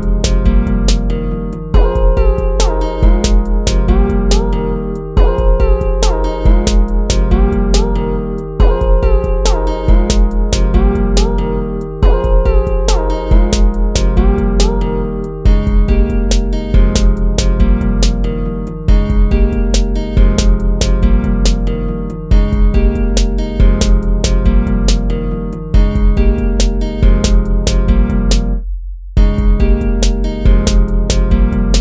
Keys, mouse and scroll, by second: 0.6 ctrl++, 0.8 ctrl++, 1.6 ctrl++, 1.9 ctrl++, 2.4 ctrl+z, 2.9 ctrl+z, 6.5 ctrl+-, 6.8 ctrl++, 7.6 ctrl++, 10.4 ctrl+-, 11.1 ctrl++, 12.9 ctrl+-, 16.0 ctrl+-, 16.2 ctrl++, 18.9 ctrl+-, 19.5 ctrl++, 22.3 ctrl++, 27.4 ctrl+-, 28.3 ctrl++, 28.6 ctrl++, 30.7 ctrl++.